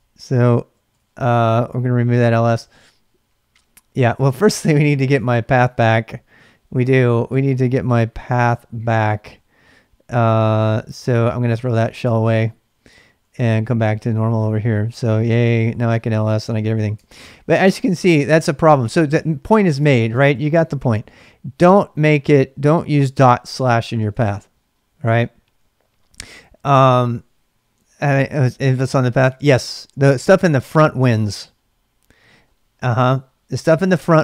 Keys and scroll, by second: 0.0-1.5 typing, 3.9-5.4 typing, 11.1-22.1 typing, 15.4 Return, 17.6 Return, 19.9 ctrl+[, 19.9 ctrl+j, 23.6 typing.